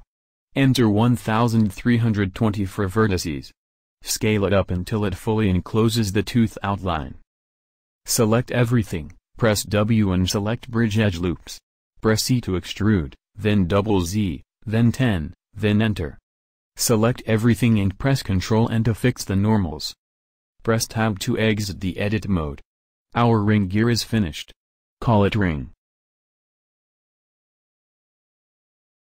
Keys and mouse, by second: 0.3-1.5 drag, 1.7 click, 4.7 s, 7.9 a, 8.1 a, 8.7 w, 10.6 click, 11.7 e, 17.7 a, 17.8 a, 18.5 ctrl+n, 19.5 KP_1, 19.8 KP_7, 20.5 Tab.